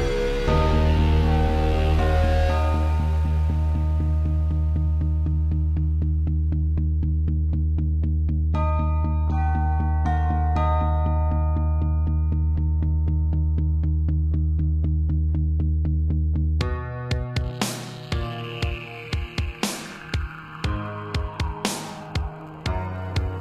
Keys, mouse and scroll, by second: 0.5 middle click, 3.8 i, 5.2 Left, 6.2 i, 7.3 Left, 7.7 Right, 8.3 Right, 9.8 1, 10.8 scroll up 2, 12.6 click, 12.7 click, 13.9 shift+click, 15.2-15.7 typing, 17.3 click, 17.4 click, 18.3 click, 18.5 click, 19.4 7, 20.2 r, 21.9 click, 22.2 typing.